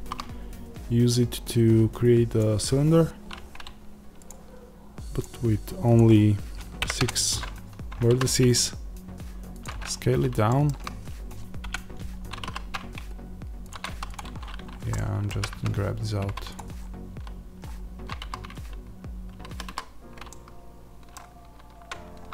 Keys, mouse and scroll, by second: 2.3 shift+a, 2.8 scroll down 1, 6.9-9.5 drag, 6.9 KP_Enter, 8.0 s, 9.7-10.4 scroll up 1, 11.5-13.6 middle drag, 12.3 s, 13.6 click, 14.3 scroll down 1, 14.8-16.5 middle drag, 15.2 g, 16.5 click, 16.6-17.5 scroll, 18.1 a, 20.2-22.3 middle drag.